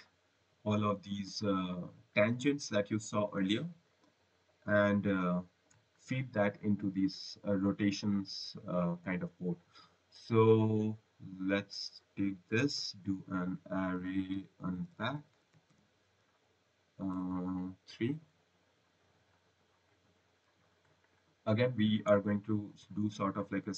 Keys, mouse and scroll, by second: 8.7 right click, 9.2 scroll, 11.6 click, 13.5-15.4 typing, 17.0-17.8 typing, 18.6 click, 19.8 click, 20.9 click, 21.4 scroll, 21.7 right click.